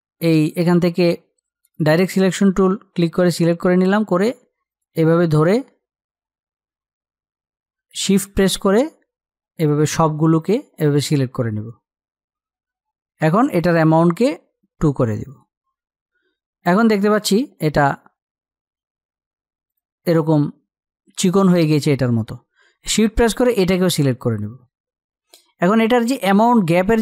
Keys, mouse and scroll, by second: 14.9-20.4 drag.